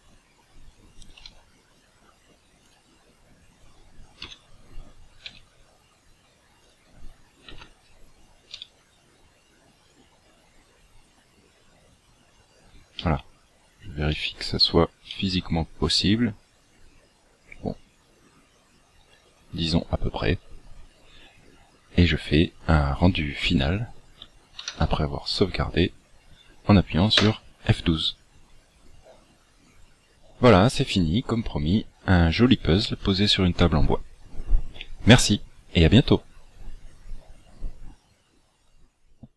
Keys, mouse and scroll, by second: 1.2 r, 4.2 KP_3, 5.2 r, 7.4 KP_1, 8.5 r, 11.4 click, 12.9 middle click, 14.1 middle click, 15.0 middle click, 24.6 ctrl+w.